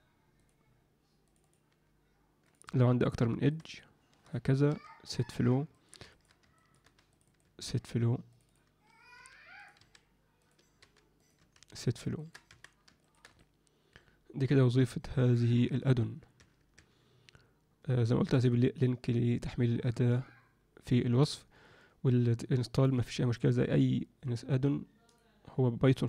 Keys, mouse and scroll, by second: 1.2 click, 1.4 click, 1.6 g, 3.0 shift+click, 3.5 shift+click, 3.7 shift+click, 4.7 q, 5.7 ctrl+alt+middle click, 6.1 alt+shift+middle click, 6.5 ctrl+alt+middle click, 7.1 click, 7.4 q, 8.3 click, 8.4 click, 9.1 g, 9.7 s, 10.8 g, 11.3 q, 12.1 ctrl+middle click, 12.5 Tab, 13.0 ctrl+alt+middle click, 13.3-15.3 alt+middle drag, 16.3 Tab, 16.7 Tab, 25.2-26.0 drag.